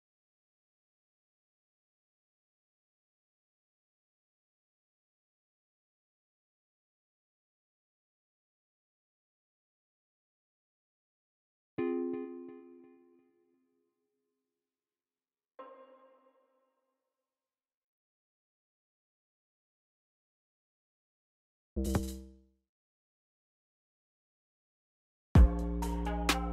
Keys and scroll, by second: 0.1 c, 0.7 super+z, 1.5 c, 3.2 u, 6.7 ctrl+super+x, 7.7 c, 11.0-12.7 typing, 14.6-15.5 typing, 17.3-18.4 typing, 20.9-23.2 typing, 24.8 typing.